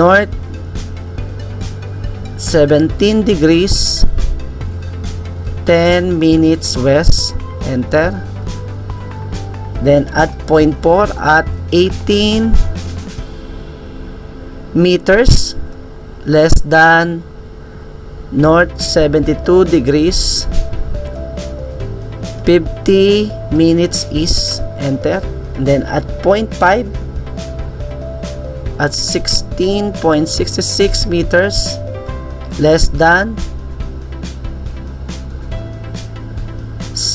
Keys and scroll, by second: 3.6-7.8 typing, 11.6-15.3 typing, 21.4-25.5 typing, 27.5-32.3 typing.